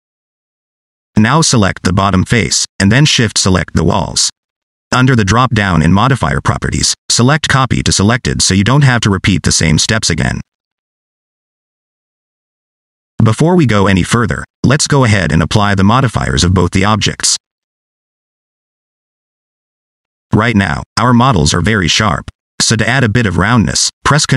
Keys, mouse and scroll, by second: 1.2 middle click, 1.5 shift+middle click, 1.7 middle click, 2.4 click, 2.5 scroll down 1, 2.6 middle click, 4.2 shift+click, 6.6 click, 11.9 click, 12.1 click, 13.6 middle click, 14.3 click, 14.5 click, 14.8 middle click, 15.3 middle click, 17.4 click, 18.2 click, 19.8 click, 23.9 ctrl+2.